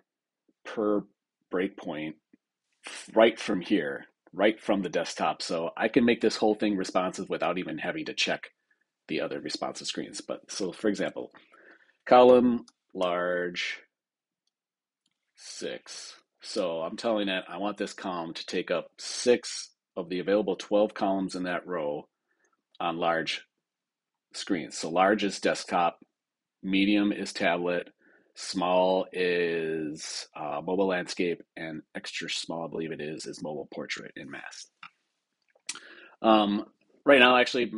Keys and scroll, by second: 16.4 Return.